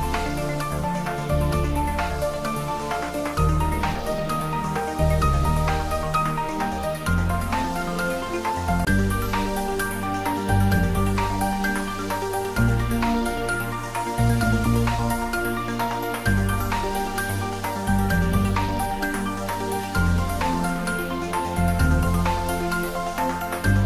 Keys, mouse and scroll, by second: 0.9-1.2 scroll up 1, 2.1-6.3 middle drag, 6.3-7.2 scroll down 1, 7.2-8.8 scroll up 1, 11.0 click, 14.1 click, 16.0-16.3 scroll down 1, 16.8 a, 18.0 click, 19.6-20.1 scroll down 1, 20.1-23.8 middle drag.